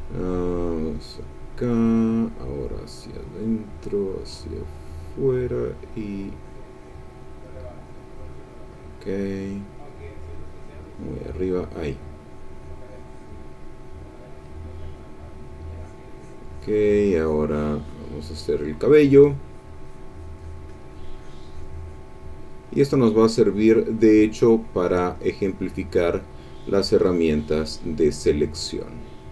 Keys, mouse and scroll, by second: 2.3 click, 3.1-7.1 drag, 7.3-13.4 drag, 14.0 middle click, 15.7-18.1 drag, 18.3-22.1 drag, 22.5-24.0 drag, 24.2-26.2 drag, 26.5-27.7 drag, 27.9-29.3 drag.